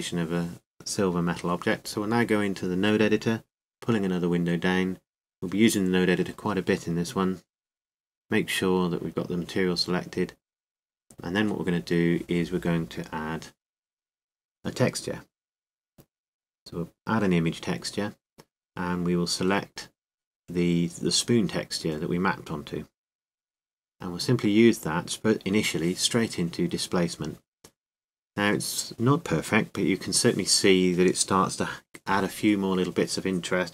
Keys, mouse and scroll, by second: 1.8-3.2 drag, 3.4 click, 12.2-18.4 drag, 24.2 click, 28.3 click.